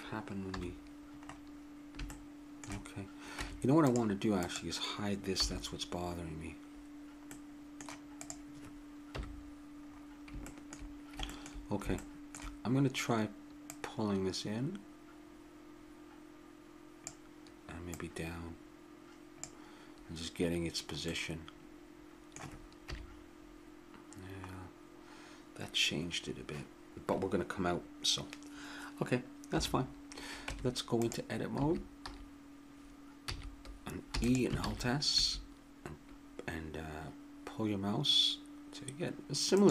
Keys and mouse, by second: 0.5 KP_1, 3.4 Tab, 5.4 h, 7.3 middle click, 8.2 right click, 9.1 KP_1, 12.3-13.6 middle drag, 13.6-15.6 drag, 17.9-21.1 drag, 21.1 middle click, 21.3-22.6 middle drag, 22.9 KP_3, 29.6 KP_1, 30.5 Tab, 31.6 a, 33.2 a, 34.1 e, 34.6 alt+s.